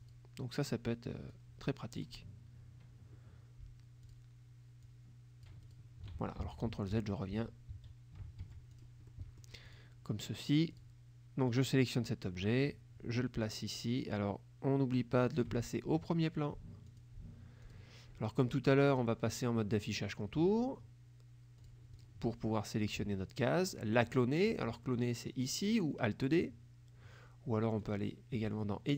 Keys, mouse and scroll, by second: 0.1 click, 1.4 click, 4.2 click, 4.9 click, 6.3 ctrl+z, 8.5 ctrl+F1, 8.8 ctrl+click, 9.2 ctrl+click, 9.7 click, 10.8 click, 11.6-15.7 drag, 17.0 click, 17.8 click, 19.0 click, 21.7 click, 22.0 click, 22.9 click, 27.9 click.